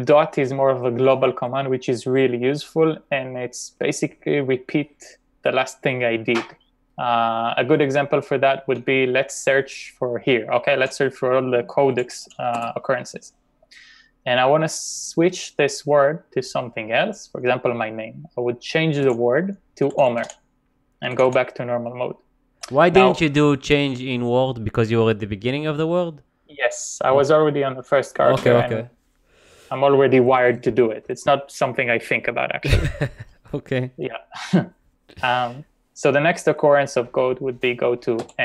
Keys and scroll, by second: 10.8-13.4 typing, 19.0-21.8 typing, 38.3 n.